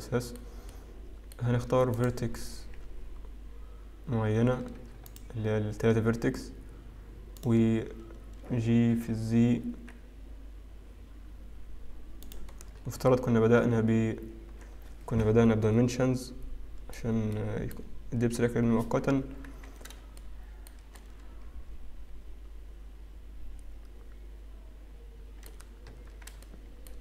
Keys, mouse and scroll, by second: 1.3 middle click, 2.1 click, 2.5-3.1 scroll up 2, 3.1-4.6 scroll down 3, 5.2 shift+click, 7.5 shift+click, 9.2 g, 12.7-13.3 scroll down 3, 13.3 Tab, 13.3 middle click, 13.3-13.7 scroll down 1, 17.5 middle click, 18.5-18.9 scroll up 4, 18.9-20.1 scroll down 3, 20.3 shift+middle click, 21.4 middle click, 23.3 middle click, 25.9-27.0 scroll up 2.